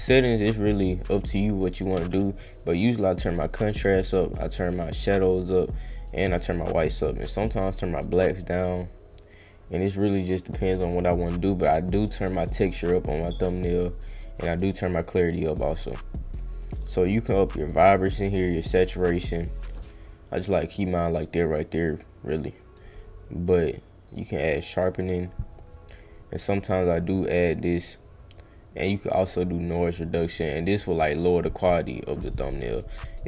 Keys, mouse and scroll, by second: 3.2-3.7 drag, 4.8-5.3 drag, 5.9 click, 7.1-8.7 drag, 10.5 click, 11.3-12.2 drag, 13.8-15.5 drag, 17.2 click, 18.3 click, 20.3 click, 21.7 click, 22.4 click, 24.1-28.3 drag, 29.0-30.0 drag, 30.0-32.3 right drag.